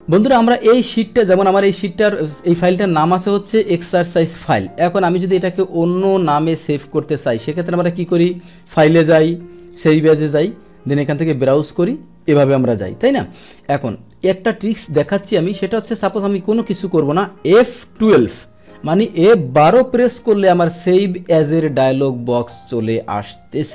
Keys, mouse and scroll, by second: 5.8 click, 7.6 click, 8.5 click, 9.7 click, 11.0 click, 14.1 click, 15.4 Escape, 15.7 click, 18.0 F12, 21.9 click.